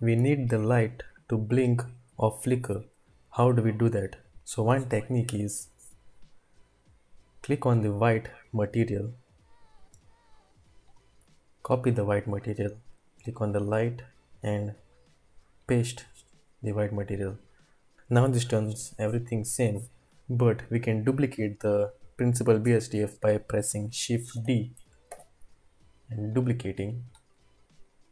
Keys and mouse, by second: 7.4 click, 8.5 typing, 10.9-11.7 drag, 13.0-13.7 typing, 13.2 click, 14.4-16.3 drag, 24.3 d, 25.2 d, 27.4 click, 27.5-28.1 middle drag.